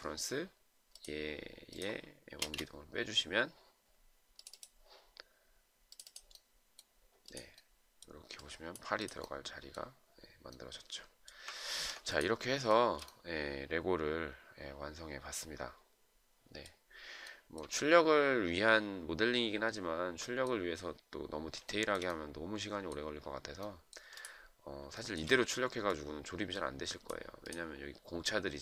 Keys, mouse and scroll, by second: 2.8 space, 12.0 ctrl+z, 13.0 shift+right click, 17.6 shift+right click, 22.0 shift+right click, 25.3 shift+right click.